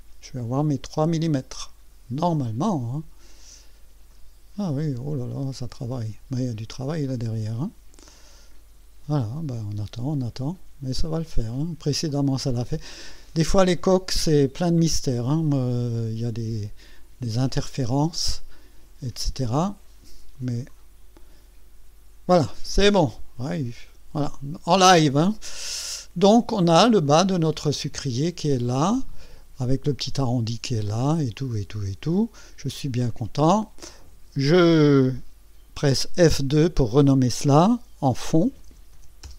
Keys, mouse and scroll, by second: 20.7-21.6 drag, 23.0 click, 24.7 scroll up 2, 25.3 scroll down 2, 25.9-27.0 right drag, 27.0-29.6 drag, 30.8 click, 32.0 right click, 34.0 click, 36.7 F2, 38.1-39.3 typing.